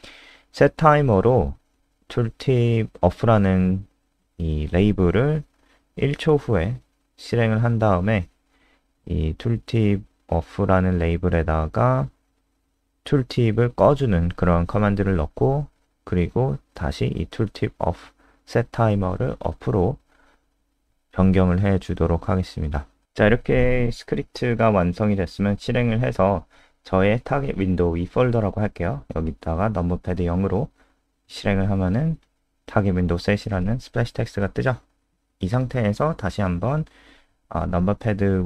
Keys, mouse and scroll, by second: 0.0-5.2 typing, 4.4 Down, 4.6 Down, 4.9 Up, 5.5 Down, 6.2 Up, 6.4 BackSpace, 6.7 ctrl+End, 6.9 Return, 7.2 Up, 7.3 Up, 7.6 ctrl+Right, 8.3 Right, 8.6 ctrl+c, 8.9 ctrl+End, 9.1 Return, 9.3 Return, 9.6 ctrl+v, 9.9-13.0 typing, 10.0 Return, 14.7 Escape, 15.1 Return, 16.0-17.6 typing, 19.9 ctrl+v, 20.9-21.9 typing, 21.9 ctrl+s, 22.4 click, 22.6 scroll up 3, 23.6-24.6 scroll down 2, 24.6-24.9 scroll up 2, 26.3 click, 27.1-27.5 scroll up 3, 27.3 click, 27.5 F5, 28.9 click, 32.2 KP_0.